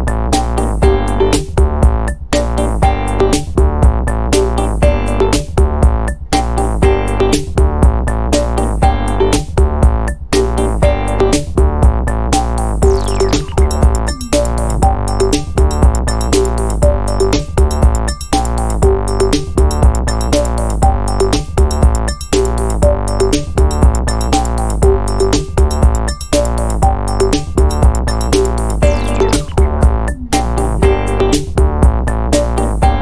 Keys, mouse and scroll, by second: 0.7 click, 2.0 ctrl+click, 3.1 click, 4.5-6.6 drag, 6.8-9.3 drag, 9.5-11.5 drag, 12.3 click, 14.1 click, 15.5 click, 16.6-20.1 drag, 20.2 scroll down 2, 20.7-21.1 scroll up 2, 21.5-21.8 scroll down 2, 21.9-23.5 drag, 27.3 click, 28.9 click, 31.5 click, 32.1 space.